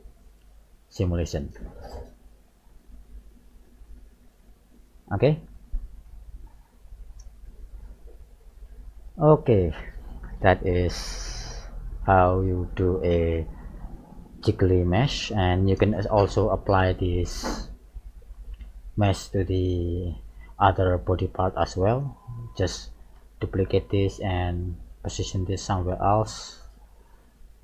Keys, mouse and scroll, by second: 2.1-2.8 scroll up 3, 2.8 middle click, 4.4 g, 8.1 middle click, 8.5-9.0 scroll down 4, 9.3 shift+middle click, 10.0 middle click, 12.3 g, 17.1 right click, 20.0 click, 20.8-21.6 scroll up 1, 21.6 shift+middle click, 23.2 shift+d, 24.3 click, 25.8 r.